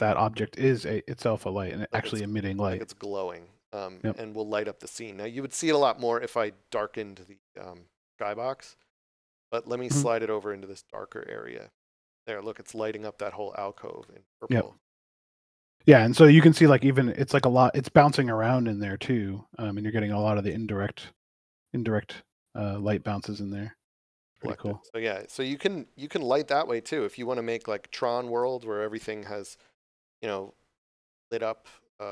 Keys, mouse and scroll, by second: 12.0 click, 15.3 scroll up 1, 15.9 middle click, 23.3 right click.